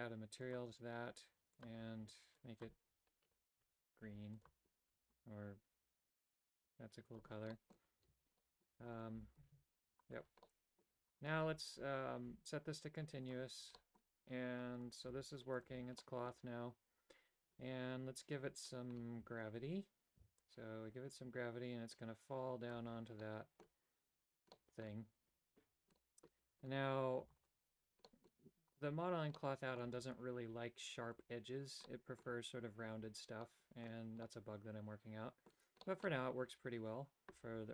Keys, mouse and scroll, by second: 0.5 click, 1.6 click, 4.5 click, 7.6 middle click, 8.1 a, 8.4 middle click, 9.0 right click, 9.3 g, 10.5 middle click, 11.2 right click, 11.5 Tab, 13.3 click, 13.8 a, 13.9 middle click, 15.2 g, 15.9 a, 16.2 middle click, 20.5-22.8 drag, 23.3 middle click, 24.6 middle click, 26.1 middle click, 27.6 Tab, 27.7 click, 28.2 middle click, 29.4 middle click, 32.0 middle click, 33.6 middle click, 34.4-35.6 middle drag, 36.0 middle click.